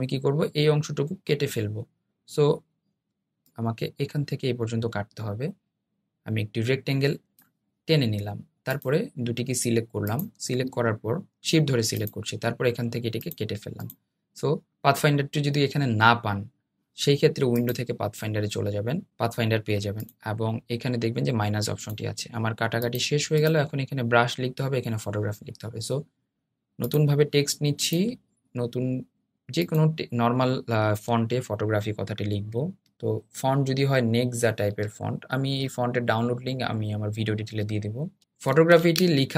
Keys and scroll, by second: 25.1 t, 38.5 super+a.